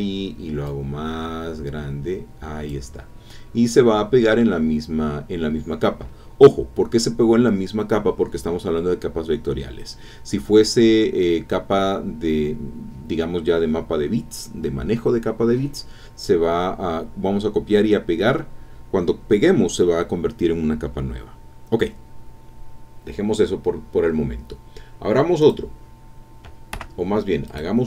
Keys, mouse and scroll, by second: 0.6-2.9 drag, 3.6-3.9 scroll up 2, 4.0-4.7 scroll down 4, 4.7-5.0 scroll up 2, 5.2-5.5 scroll down 2, 25.4 click, 26.7 Escape, 27.5 click.